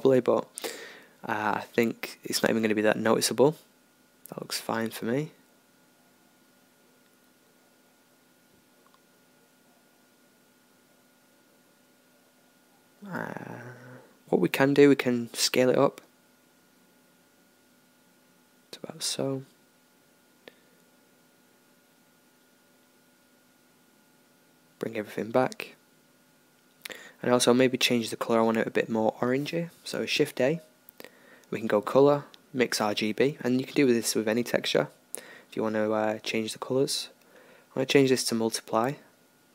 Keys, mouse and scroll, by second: 0.0 right click, 0.5-7.8 middle drag, 7.8 Tab, 7.8-11.4 drag, 11.4-12.5 right drag, 12.5 Tab, 14.4 s, 19.5 Tab, 21.7-23.0 middle drag, 23.9 alt+h, 25.6-28.1 middle drag, 30.2-33.7 drag, 30.2 shift+a.